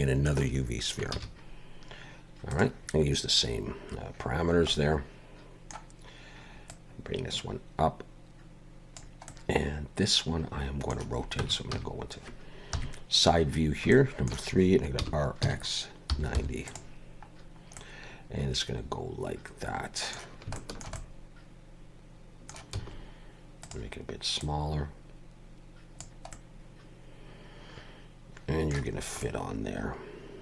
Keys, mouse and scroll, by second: 1.1 shift+a, 4.4 scroll down 4, 4.7 middle click, 6.7 click, 9.3 middle click, 11.4 Tab, 11.7 a, 12.7 KP_3, 13.6 scroll up 2, 13.9 shift+middle click, 15.0 r, 17.3-17.8 scroll up 1, 17.8 middle click, 20.6 shift+middle click, 22.7 s, 24.4 click, 26.3 middle click, 29.0 scroll up 2, 29.2 middle click.